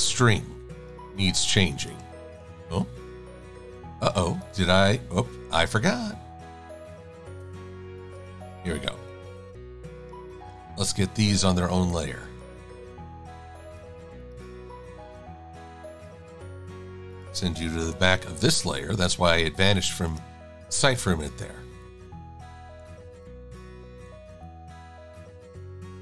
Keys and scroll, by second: 10.7 super+x, 14.7 super+f, 16.3 shift+a, 18.0 shift+super+[, 18.3 shift+super+a, 19.4 v, 23.1 e.